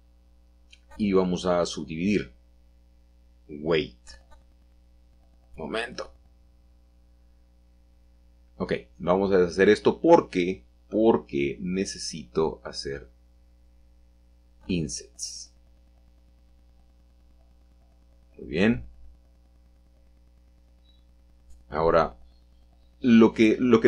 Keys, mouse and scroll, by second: 0.1-1.2 middle drag, 1.4 click, 3.9 click, 6.0-7.1 drag, 9.9-10.3 scroll up 1, 11.5 shift+middle click, 12.4 i, 18.2-20.0 shift+drag, 21.3 right click, 22.2-23.3 drag.